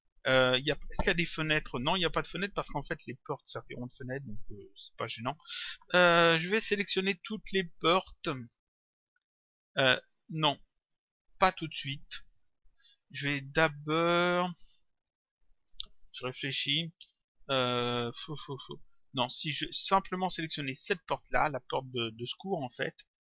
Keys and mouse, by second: 11.5 click, 20.8 click, 22.2 click.